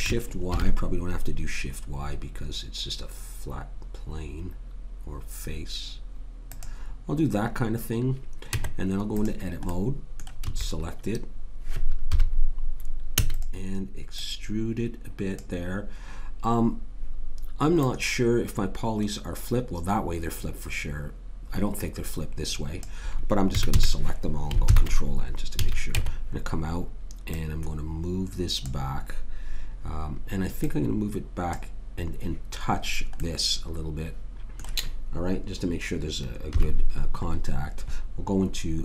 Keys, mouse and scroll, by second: 8.5 Tab, 10.4 a, 12.1 KP_3, 13.1 e, 14.2 click, 17.8 click, 23.5 a, 23.7 a, 24.7 ctrl+n, 25.6 a, 25.9 Tab, 27.3 click, 30.6 click, 33.2-35.2 middle drag, 36.5 KP_3, 37.2-38.8 middle drag.